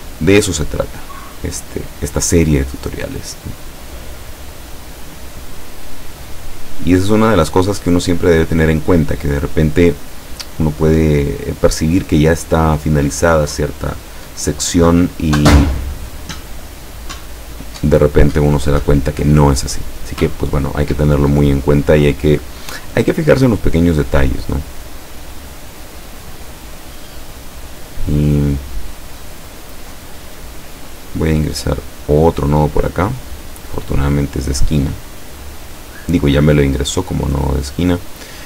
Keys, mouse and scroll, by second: 0.1 click, 1.4-5.3 drag, 5.9-8.6 drag, 9.2-11.9 drag, 22.2-26.4 drag, 31.9 click, 33.7-36.3 drag.